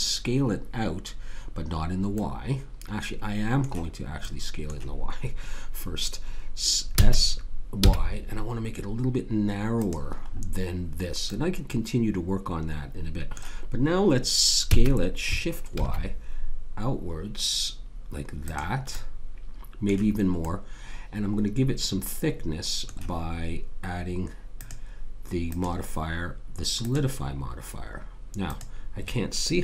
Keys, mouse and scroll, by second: 2.1-6.9 middle drag, 6.9 s, 9.8 s, 10.3-12.6 middle drag, 14.7 s, 18.9-21.6 middle drag, 24.5 click, 28.5 click.